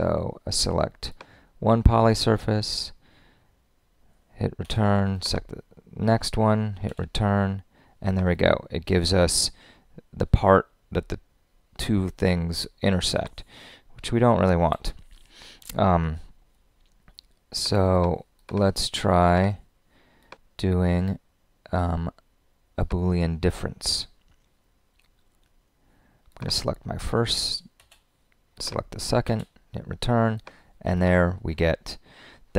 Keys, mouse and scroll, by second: 4.6 Return, 14.6 super+z, 27.8 Return.